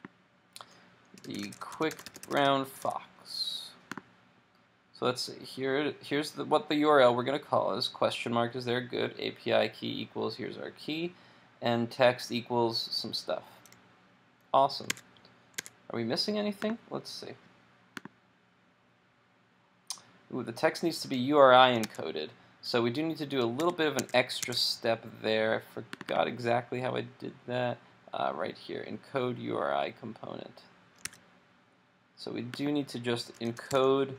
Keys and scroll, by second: 14.9 super+Tab, 15.7 super+Tab, 21.8 super+Tab, 23.6 super+`, 24.0 super+Tab, 31.1 super+w.